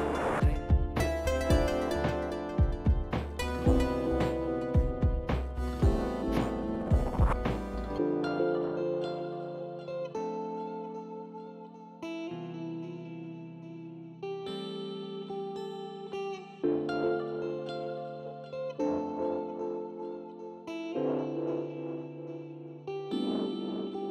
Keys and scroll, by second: 18.5 w, 18.6 w.